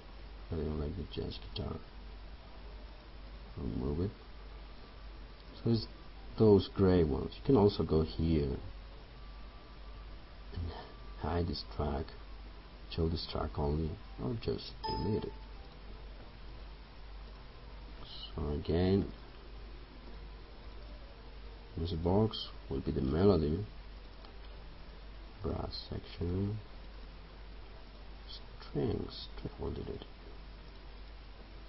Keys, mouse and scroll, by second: 19.2 BackSpace.